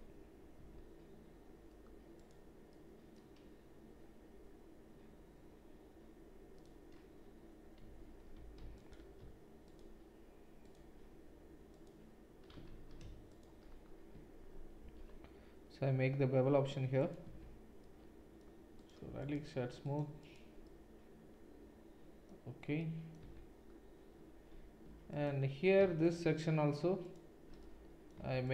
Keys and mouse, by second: 0.6 a, 2.1 click, 2.2-8.8 middle drag, 7.8 3, 8.3 2, 8.8 alt+click, 8.9 alt+middle click, 9.7-10.8 alt+shift+drag, 10.8 alt+shift+middle click, 11.7 alt+shift+click, 11.8-13.3 alt+shift+middle drag, 12.7 ctrl+z, 13.3 alt+shift+click, 13.6-18.8 shift+middle drag, 14.8 ctrl+b, 17.4 Tab, 18.8-28.5 right drag, 23.2 Tab, 25.1 alt+click, 25.1 alt+middle click, 26.0 click, 26.0 middle click, 27.1 alt+shift+click, 27.1 alt+shift+middle click.